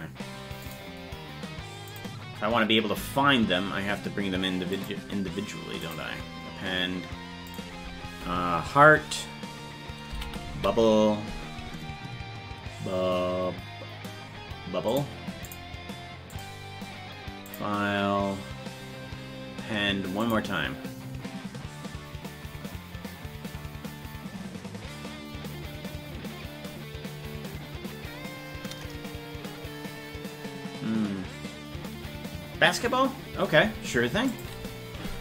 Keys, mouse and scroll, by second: 4.7-6.0 drag, 18.7-20.4 drag.